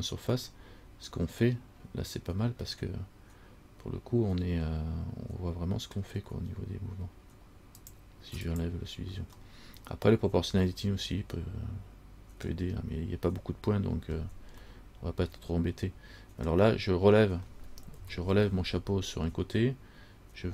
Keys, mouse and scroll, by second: 0.6 middle click, 2.9 middle click, 3.5 middle click, 8.0 click, 8.6 click, 9.6 middle click, 14.8 middle click, 18.2 KP_1.